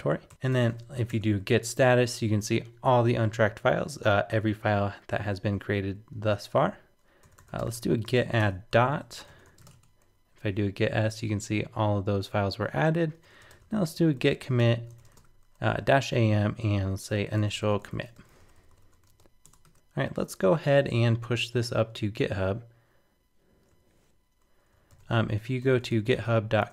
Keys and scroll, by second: 22.0 super+Tab, 24.9 shift+super+n.